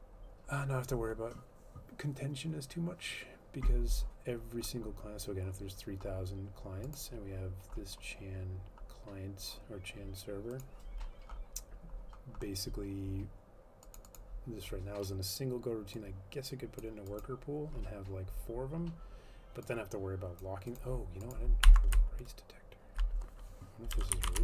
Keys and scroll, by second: 22.1 Left, 24.0-24.4 typing.